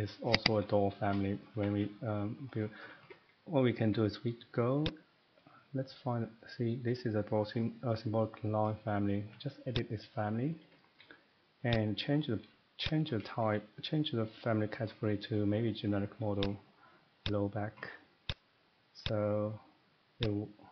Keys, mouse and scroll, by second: 0.4 click, 0.6 click, 1.4 middle click, 1.5 Escape, 1.7 Escape, 2.1-2.9 scroll up 5, 2.3 middle click, 2.9 Escape, 3.0 Escape, 3.2 Escape, 3.8 Escape, 4.8 click, 5.0-5.4 scroll, 6.9 scroll up 5, 8.9 scroll down 1, 9.3 middle click, 9.8 click, 11.7 click, 12.8 click, 13.4 g, 16.4 click, 17.2 click, 18.3 click, 19.0 click, 20.2 click.